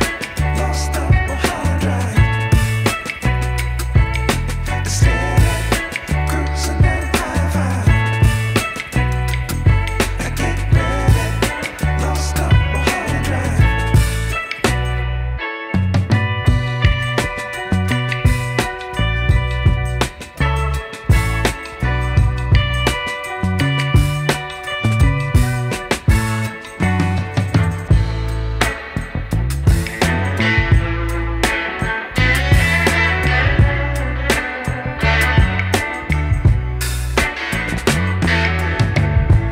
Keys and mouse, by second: 4.5 click, 6.8 click, 11.8 click, 13.2 click, 14.8 z, 15.2 click, 15.6 space, 15.8 click, 17.9-20.5 typing, 19.5 click, 28.2 z, 28.4 click, 30.8 space, 31.0 click, 31.3 space, 32.7 ctrl+0, 33.9 click, 34.9 ctrl+z, 36.0 click, 39.3 click, 39.3 click.